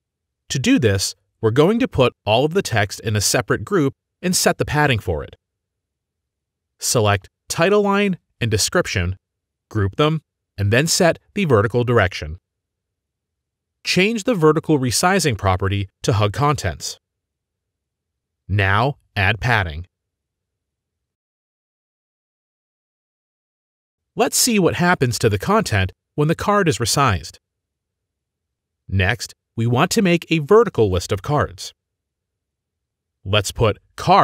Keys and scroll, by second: 10.4 ctrl+g.